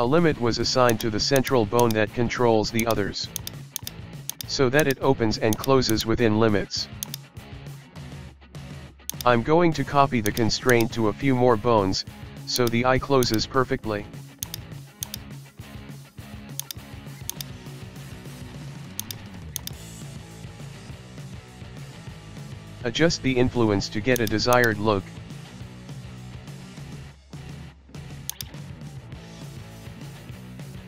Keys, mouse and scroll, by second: 1.4 right click, 1.8-2.9 drag, 3.4 Right, 3.8 click, 4.8 Right, 5.9 shift+Right, 7.0-8.5 drag, 9.6-10.3 shift+middle drag, 10.3 right click, 10.7-12.1 drag, 12.1-12.6 shift+middle drag, 12.6 right click, 13.2-14.5 drag, 14.5 right click, 15.0-16.5 drag, 16.6 right click, 17.3-18.8 drag, 19.0 right click, 19.6-21.1 drag, 23.5-24.2 scroll down 1, 24.2 right click, 24.6 right click, 27.5 alt+g, 28.3 right click, 28.9 alt+g, 29.6-30.8 shift+middle drag.